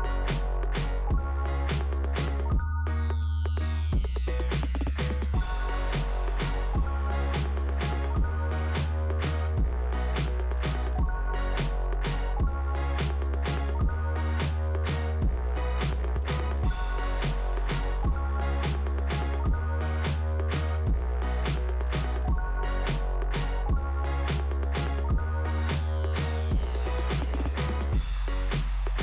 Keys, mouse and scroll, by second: 0.0 right click, 0.7 click, 1.8 right click, 2.7 click, 6.3 click, 7.4 click, 8.5 click.